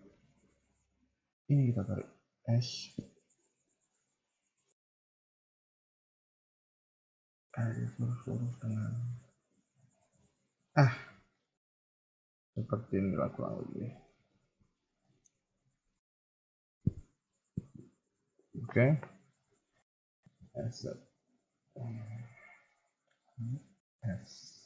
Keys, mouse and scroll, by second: 1.4 alt+click, 2.3 s, 10.8-14.0 scroll down 3, 11.3 middle click, 14.2 KP_1, 15.0 shift+middle click, 15.2-17.2 shift+scroll up 3, 19.2-20.3 scroll up 2, 20.3 s, 22.6 r, 23.9 s.